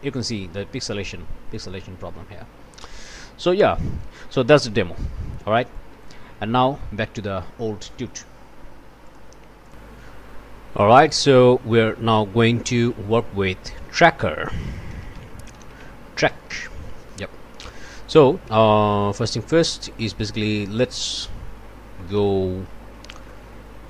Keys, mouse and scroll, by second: 0.9 scroll up 1, 2.5 scroll down 1, 2.9 middle click, 4.0 click, 4.6 Delete, 4.9 middle click, 5.7 click, 6.2 Delete, 6.8 click, 9.1 click, 9.6 click, 11.1 click, 11.7 click, 12.8 ctrl+shift+s, 14.7-16.3 typing, 19.3 click, 20.1 click, 21.2 middle click, 21.9 middle click, 22.3-22.9 scroll down 1, 22.9-23.3 scroll up 1, 23.3 middle click.